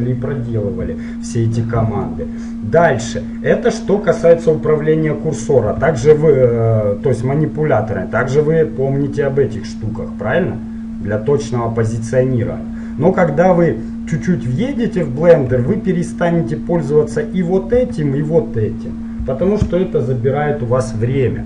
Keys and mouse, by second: 3.0-6.0 middle drag, 6.0 n, 8.3-12.0 drag, 12.1-14.0 drag, 15.6 n, 17.9 n, 19.2 n, 21.3-21.4 middle drag.